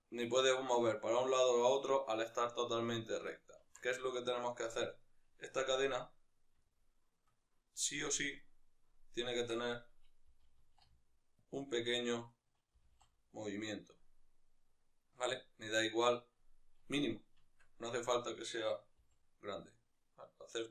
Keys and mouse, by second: 1.5 right click, 3.5 Tab, 3.9-4.7 ctrl+middle drag, 4.7-6.5 right drag, 7.1-10.1 right drag, 10.1 g, 12.0 right click, 12.5 g, 17.4 Tab, 17.7-18.7 right drag, 18.7 g.